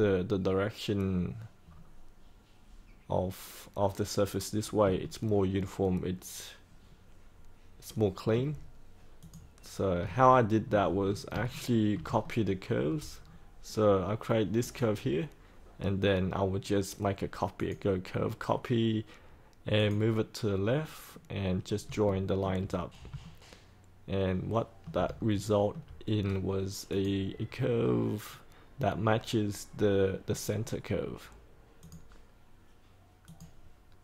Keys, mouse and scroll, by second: 1.6 scroll down 1, 4.9-8.3 alt+middle drag, 9.1 click, 10.0 alt+middle click, 11.0 scroll up 1, 11.3 shift+scroll down 1, 12.2 alt+middle click, 13.1-14.5 scroll down 1, 14.5 click, 21.2-21.8 scroll down 1, 22.0 shift+middle click, 23.2-24.8 alt+middle drag, 25.1 shift+middle click, 26.0-26.8 scroll down 1, 26.8 click, 27.4 scroll up 1, 31.7 click.